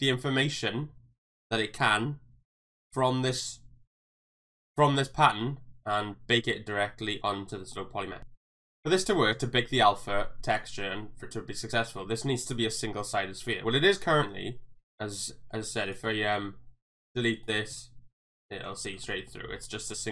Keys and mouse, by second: 7.7 middle click, 14.8 Tab, 15.2 g, 15.6 x, 15.9 click, 16.1-17.1 shift+middle drag, 17.7 x, 18.5 middle click, 19.0 shift+middle click, 19.6 middle click.